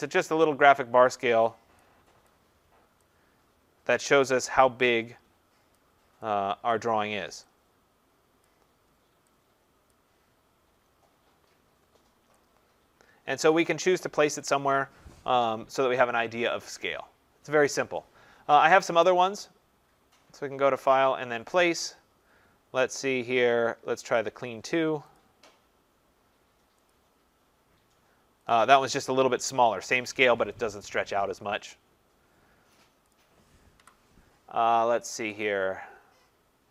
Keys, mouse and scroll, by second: 1.8 click, 2.6 click, 2.7-3.0 click, 3.0 click, 3.1 click, 3.5 click, 4.0-5.1 click, 4.8 click, 5.8 click, 6.5 click, 6.7 click, 7.6 click, 8.4 click, 9.9 click, 13.6 click, 14.4 click, 19.0 click, 21.7 click, 24.2 click, 25.2 click, 26.9 click, 28.5 click, 33.2 click, 33.8 Delete, 35.4 click.